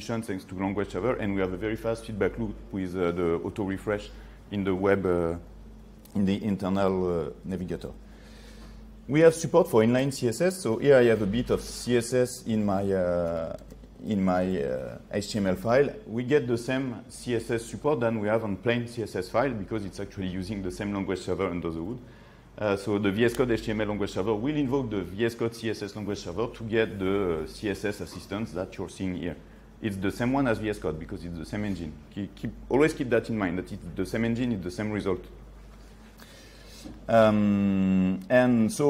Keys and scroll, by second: 13.8 ctrl+space, 37.2 ctrl+z.